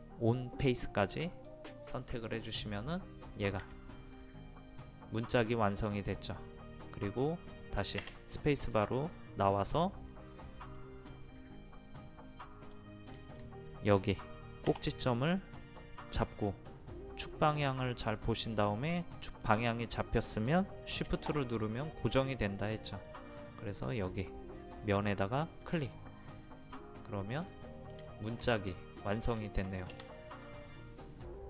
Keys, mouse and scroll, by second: 2.0 middle click, 2.5 scroll down 1, 2.7-3.6 scroll up 1, 3.6 Escape, 5.5 middle click, 8.6 click, 10.1 scroll up 1, 10.8 middle click, 11.3-11.8 scroll up 1, 11.8-12.9 middle drag, 14.7 m, 15.6 click, 25.5 shift+click, 26.0 middle click, 26.7-27.0 scroll down 1, 27.5 middle click, 28.5-29.0 scroll up 1, 29.0-29.4 scroll down 1, 29.4 shift+middle click.